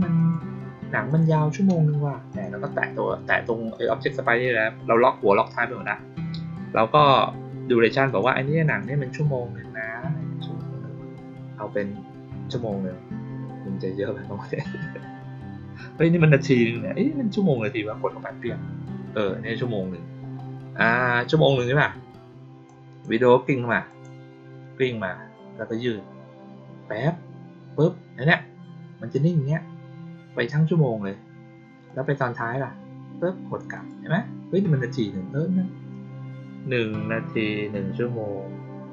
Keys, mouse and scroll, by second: 0.1 click, 1.0 click, 2.2 click, 3.6 click, 8.0 click, 8.6 click, 22.6-22.9 drag, 23.8 click, 31.8 click, 33.7 click.